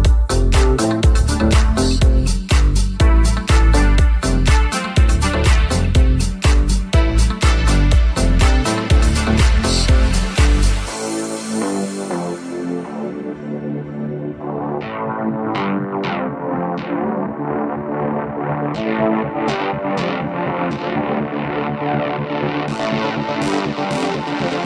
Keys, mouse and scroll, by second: 2.4 i, 3.7 g, 13.0 KP_1, 14.3 Tab, 15.0 h, 16.2 Tab, 16.8 ctrl+Tab, 17.0-18.7 ctrl+middle drag, 18.7-24.6 drag.